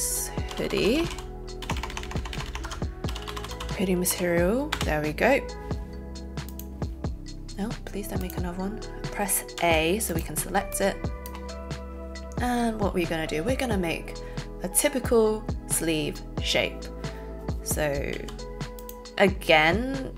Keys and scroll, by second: 0.4-1.6 typing, 2.6 Caps_Lock, 2.8-4.7 typing, 9.7 a.